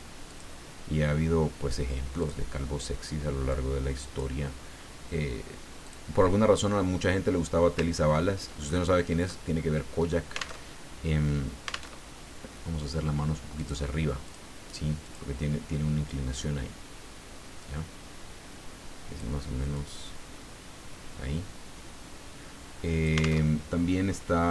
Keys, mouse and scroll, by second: 0.3 click, 2.2 click, 3.5 click, 5.8 click, 7.0 scroll up 1, 7.4-8.2 scroll down 2, 8.7 ctrl+click, 10.6 alt+Tab, 11.9 alt+Tab, 13.5 click, 14.2 click, 15.0 click, 16.1-19.4 drag, 19.7-23.4 drag, 23.4 alt+Tab.